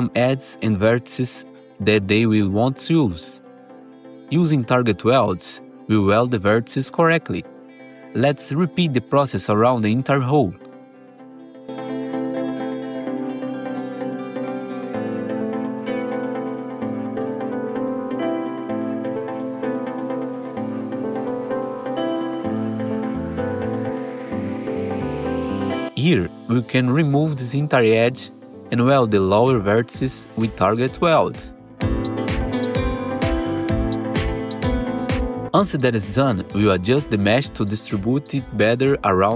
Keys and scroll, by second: 0.6 1, 1.2 ctrl+shift+w, 7.9 ctrl+shift+w, 11.0 ctrl+z, 12.7 BackSpace, 13.6 ctrl+shift+w, 15.4 BackSpace, 16.9 BackSpace, 19.1 ctrl+shift+w, 20.8 ctrl+shift+w, 24.9 ctrl+shift+w, 27.2 2, 28.3 ctrl+BackSpace, 29.0 1, 29.7 ctrl+shift+w, 31.6 ctrl+shift+w, 34.0-35.3 typing, 37.2 s, 39.2 s.